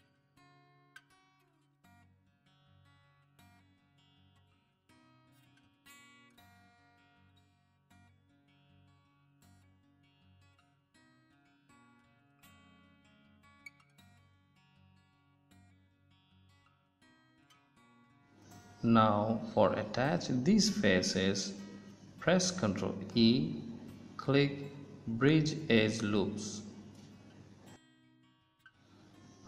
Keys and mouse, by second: 1.9 ctrl+z, 7.0 KP_1, 10.7 click, 12.9 KP_1, 14.2-15.8 drag, 16.6 click, 17.6-18.8 middle drag, 18.8-20.6 right drag, 20.6 middle click, 21.3 middle click, 22.6 ctrl+e, 27.9 middle click, 28.2 middle click, 28.5 middle click.